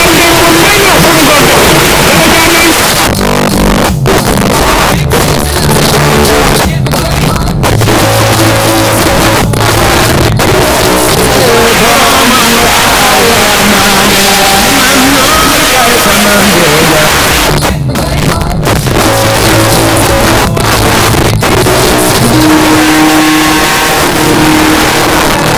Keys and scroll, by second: 2.7 Page_Down, 17.1 Page_Down.